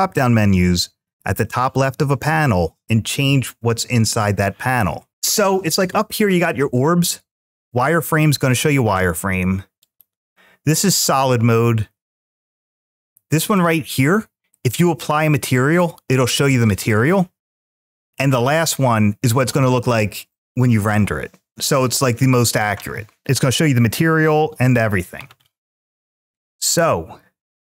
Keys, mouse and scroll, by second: 7.5 click, 9.7-12.4 drag, 13.2 click, 18.0 click.